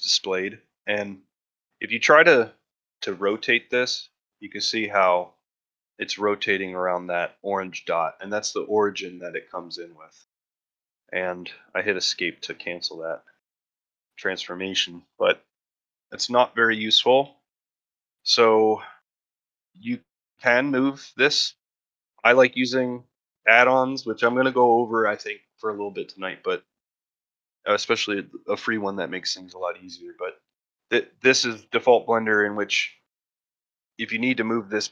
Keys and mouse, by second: 2.1 ctrl+middle drag, 2.5 shift+middle drag, 11.9-12.9 middle drag, 13.1 middle drag, 13.6 shift+middle drag, 16.6-17.0 middle drag, 17.2 shift+middle drag, 18.2-18.7 middle drag, 19.8 shift+middle click, 21.8 ctrl+middle drag, 22.2 shift+middle drag, 22.6 ctrl+middle drag, 24.0 middle click, 31.3 middle drag, 31.7 shift+middle click.